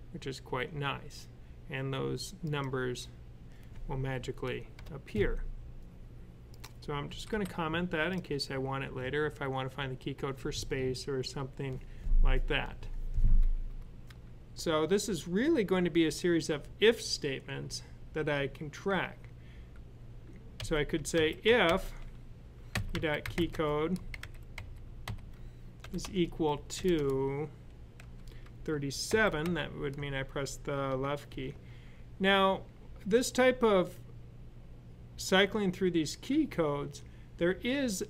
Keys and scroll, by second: 6.9 typing, 20.4-21.5 typing, 22.6-26.8 typing, 27.8 typing, 28.9-29.3 typing, 31.1 typing.